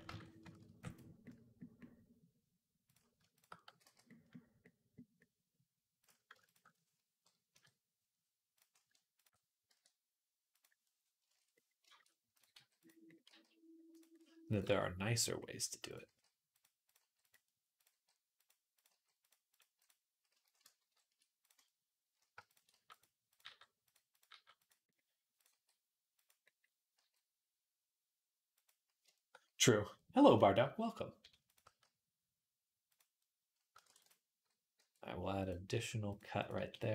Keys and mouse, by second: 0.4 ctrl+r, 3.5 x, 6.3 alt+shift+click, 6.4 middle click, 7.3 KP_3, 7.3 middle click, 8.3 click, 8.4-12.1 ctrl+middle drag, 9.5 e, 11.1 shift+Tab, 12.1 click, 12.2-16.6 middle drag, 12.3 g, 13.1 g, 14.5 g, 15.9-20.7 typing, 16.6 click, 16.7-31.2 middle drag, 17.5 click, 18.5 click, 22.2 shift+click, 22.5 g, 23.2 g, 24.1 g, 25.3 g, 26.8 g, 31.2 click, 31.3-36.9 middle drag, 31.5 g, 33.6 ctrl+r, 34.5 g, 35.5 g, 36.4 g.